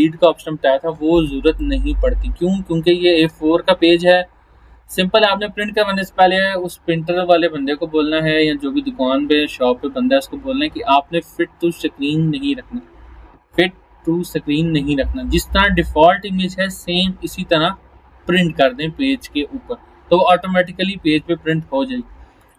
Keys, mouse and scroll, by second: 1.2 space, 1.6 click, 1.7-3.4 space, 3.5 alt+scroll down 1, 4.2 alt+scroll up 1, 22.4 click.